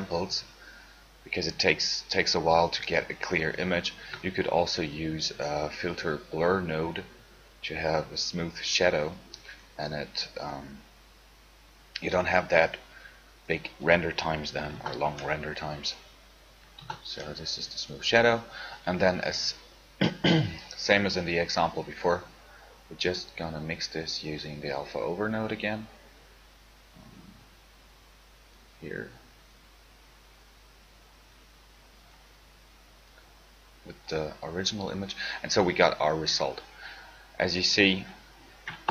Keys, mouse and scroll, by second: 7.1 shift+a, 12.5-15.2 drag.